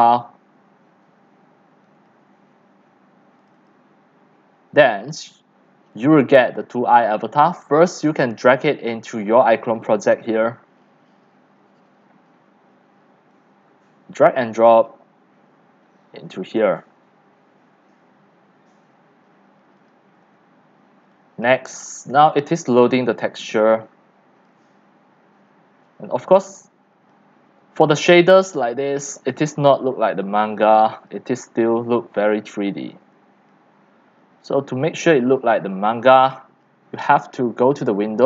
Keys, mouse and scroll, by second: 2.2 click, 3.7 click, 6.5 click, 7.7 click, 8.6-9.5 drag, 9.9 drag, 13.3-14.9 drag, 20.2 scroll, 20.2 scroll, 20.3 scroll, 20.8 middle click, 21.2 x, 21.4 click, 21.6 c, 22.5 click, 22.9-24.7 typing, 24.4 click, 24.8 middle click, 24.9 middle click, 25.0-25.4 scroll up 5, 25.8-27.5 typing, 27.1 click, 29.0 scroll up 5, 29.5 x, 29.8 click, 30.3 x, 30.6 c, 31.4-32.0 drag, 32.0 w, 32.9 click, 33.7-34.3 scroll down 8, 34.3-36.6 typing, 34.7 click, 35.2 click, 36.5 click.